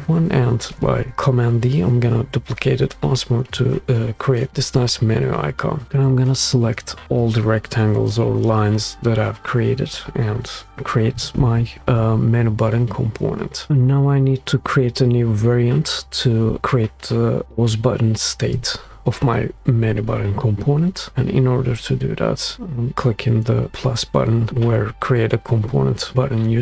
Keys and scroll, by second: 11.2 alt+super+k.